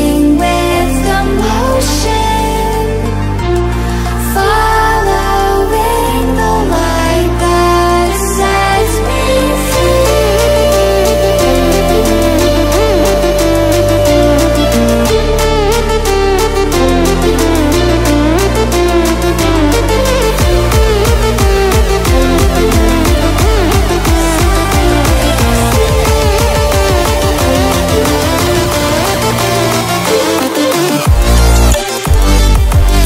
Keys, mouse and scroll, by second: 0.8-8.3 drag, 9.6 Escape, 10.1 space, 10.4 click, 10.6-11.3 space, 12.2-14.0 drag, 17.6-18.3 drag, 19.0 ctrl+w, 20.6 ctrl+w, 22.6 click, 30.5 space, 30.7 click, 31.1 space.